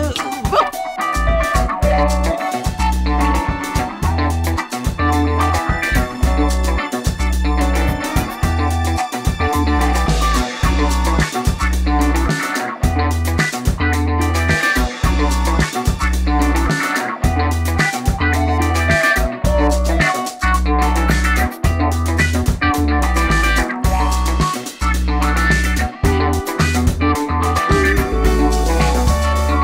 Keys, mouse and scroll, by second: 2.3 click, 2.3-3.3 typing, 2.8 click, 4.0 click, 4.4 click, 5.0-6.2 middle drag, 6.5 click, 7.1 g, 8.7 click, 8.7-9.5 typing, 11.0 click, 11.0 typing, 11.3 click, 11.8-12.9 middle drag, 15.5 click, 16.0 g, 18.0 click, 18.3 middle click, 18.8 click, 19.9 Tab, 20.5 middle click, 21.5 click, 24.0-24.5 drag, 24.8-25.5 drag, 25.3-27.2 typing, 26.6 drag, 27.1 click, 27.8-28.1 middle drag, 28.5 click, 29.2 middle click.